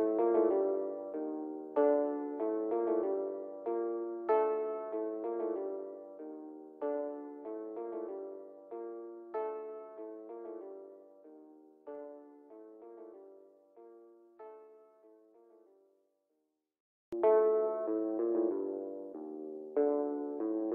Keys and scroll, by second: 0.9 c, 1.8 F3, 2.2 Escape, 3.4 shift+F2, 4.0 Escape, 8.7 F3, 16.9 Delete.